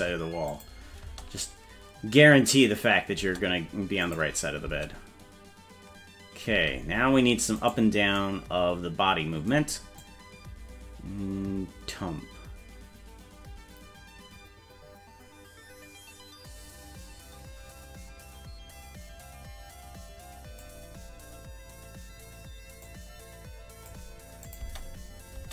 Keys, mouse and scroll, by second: 0.5 click, 1.0 space, 3.2 space, 4.0 click, 4.6 space, 6.5 space, 7.6 right click, 10.0-20.6 drag, 22.8-23.9 drag, 24.4 click, 24.6 space, 25.3 space.